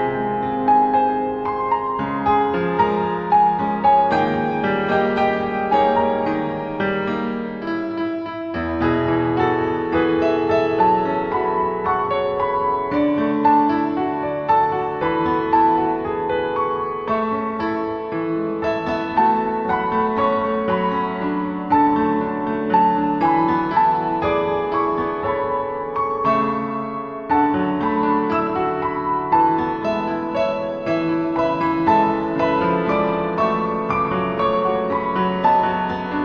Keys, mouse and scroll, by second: 2.7 click, 6.2-7.1 scroll down 5, 7.4 middle click, 8.7 scroll down 1, 9.8 click, 16.9 click, 17.6 click, 19.3 click, 23.1-23.7 scroll up 4, 24.3-27.0 scroll up 14, 27.0-27.7 scroll up 3, 29.6 ctrl+Tab, 32.4 click, 33.2-34.4 scroll down 4, 34.4-35.1 scroll up 3, 35.1 click.